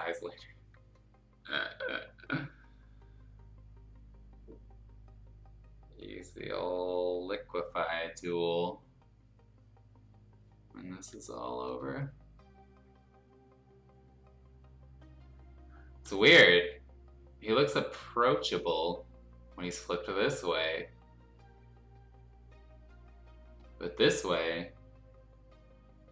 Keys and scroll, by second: 11.7 F2, 20.4 F2.